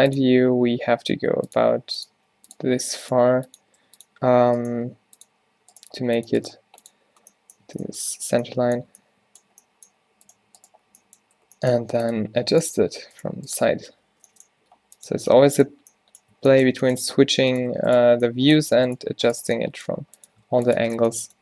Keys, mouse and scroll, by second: 0.4 r, 1.7-4.8 typing, 6.1 g, 6.5 g, 7.2 z, 7.7 Tab, 8.4 Tab, 11.5 g, 14.3 g, 15.2 Tab, 16.4 Tab, 20.2 g, 20.5 ctrl+r.